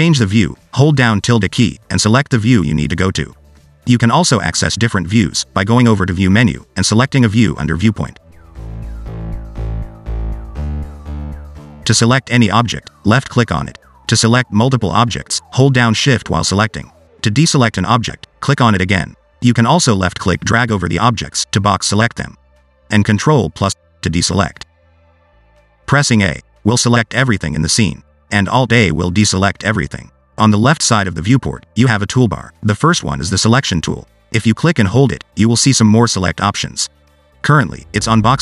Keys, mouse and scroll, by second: 5.4 click, 8.5 middle click, 12.8 click, 14.0 click, 14.4 click, 15.5 click, 17.0 shift+click, 18.0 shift+click, 19.2 shift+click, 21.3 click, 22.1 click, 24.5 ctrl+click, 27.8 a, 29.1 alt+a, 34.7 click, 35.6 click.